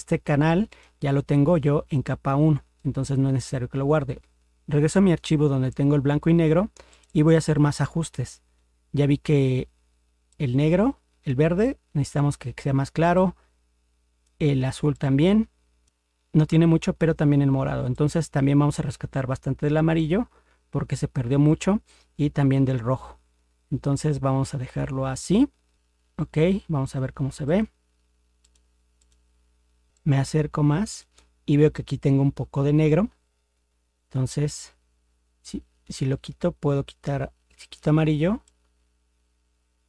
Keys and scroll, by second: 29.9 ctrl++.